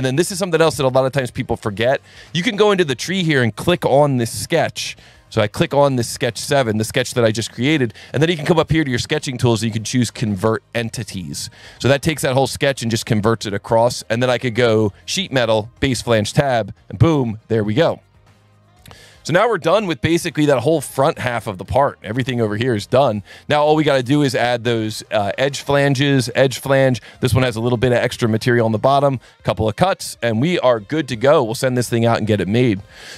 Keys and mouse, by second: 0.9 click, 1.5 alt+1, 2.5 click, 3.5 ctrl+shift+click, 5.0 alt+1, 6.2 click, 11.4 click, 14.9 click, 15.8 click, 17.7 click, 18.4 click, 20.9 alt+1, 21.3 click, 22.1 click, 23.1 alt+1, 23.8 alt+1, 24.2 click, 24.9 click, 26.5 click, 27.5 click, 29.4 click, 30.2 click, 30.9 alt+1, 32.1 click.